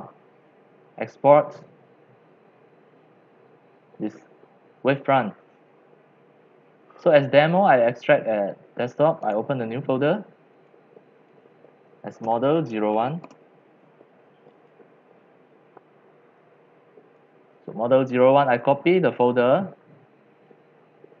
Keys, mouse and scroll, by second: 9.3-10.6 right drag, 10.7 drag, 12.0-14.5 typing, 14.5 click, 14.7 click, 19.1-21.2 drag.